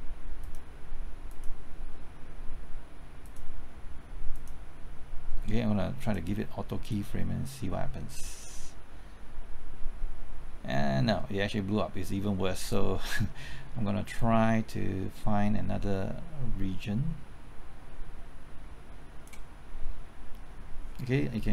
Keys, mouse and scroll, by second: 21.4-21.5 typing.